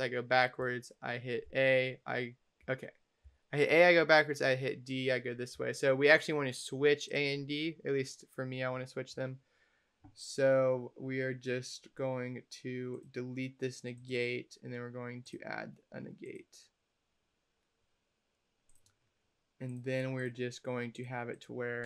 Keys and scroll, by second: 1.3 a, 3.1 a, 3.9 d.